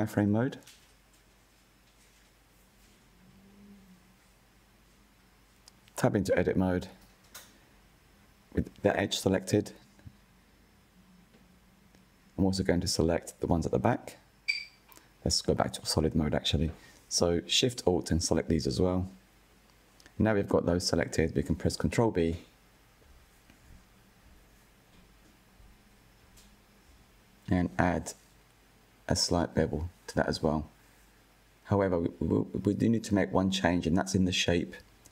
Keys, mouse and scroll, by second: 2.5 click, 5.2 Tab, 6.8-7.8 drag, 9.6-10.9 middle drag, 10.9-11.3 scroll down 1, 11.3-13.2 shift+middle drag, 13.2-14.3 scroll down 2, 14.3 click, 14.7-16.0 shift+middle drag, 16.0 alt+shift+click, 17.7 alt+shift+click, 18.5-21.6 middle drag, 21.6-22.1 scroll up 1, 22.1 middle click, 22.6-23.6 scroll up 1, 23.6-25.6 middle drag, 25.6 ctrl+b, 31.9-34.9 middle drag.